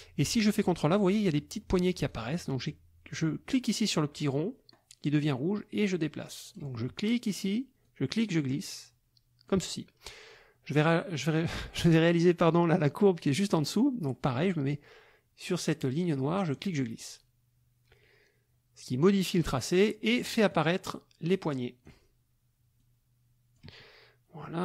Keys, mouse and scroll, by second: 2.1-6.7 drag, 7.8-9.6 drag, 16.5-19.6 drag, 20.5-22.0 drag, 22.7-23.7 drag, 24.4-24.6 drag.